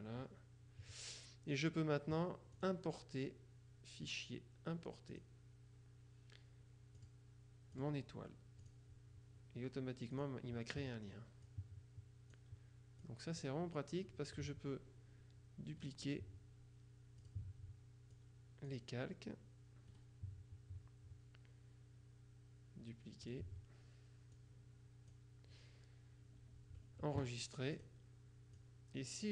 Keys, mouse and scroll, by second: 2.7 click, 5.2 click, 7.1 click, 7.8 click, 8.7 click, 10.3 click, 11.5 click, 13.1 click, 15.9 right click, 17.3 click, 18.3 click, 20.0 right click, 23.4 click, 24.5-25.7 drag, 27.9 click, 28.7 click.